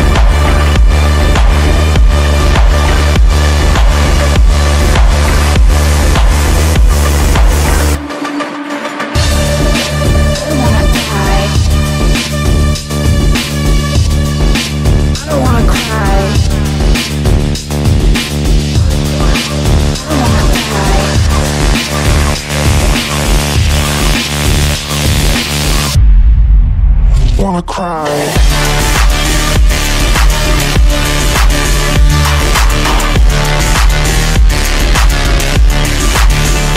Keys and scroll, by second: 5.3 KP_Add, 5.8 w, 8.8 d, 10.8 f, 17.7 Delete.